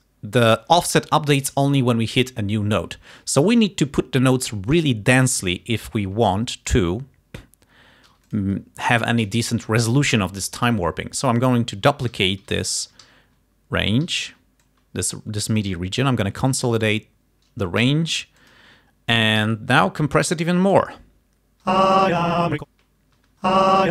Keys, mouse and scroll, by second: 5.6 t, 5.8-7.0 drag, 8.2 g, 8.4 scroll up 1, 11.8 alt+d, 14.1 r, 14.7 click, 15.6 right click, 16.9 click, 17.9 g, 18.5 click, 19.5 t, 19.6-21.0 drag, 21.8 space, 23.3 space.